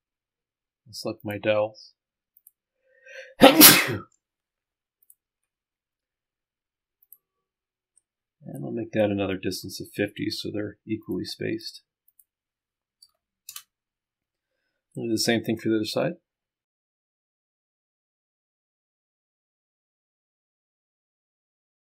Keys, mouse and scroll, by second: 1.3 ctrl+click, 2.4 ctrl+click, 5.1 ctrl+click, 7.1 click, 11.1 click, 12.1 click, 14.3 middle click, 15.1-16.1 right drag, 16.1 middle click, 16.8 click, 18.8 click, 19.4 click, 20.1 click, 20.7 click, 20.8 click, 21.2 click, 21.5 click.